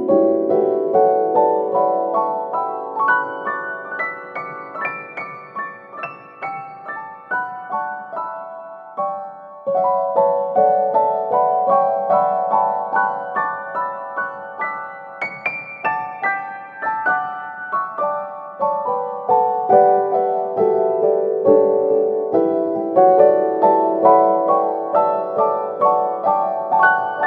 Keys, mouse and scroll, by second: 1.6 click, 3.5 n, 4.0 n, 4.1 n, 5.0 click, 5.8-9.1 drag, 6.4-7.1 scroll up 3, 7.1-9.1 scroll down 3, 10.7 click, 12.0-14.9 drag, 14.9-15.4 scroll down 2, 15.4-16.5 middle drag, 16.5 scroll up 3, 16.9-18.7 middle drag, 17.4 click, 18.7 click, 20.0-23.0 drag, 23.3 click, 24.3-27.1 drag.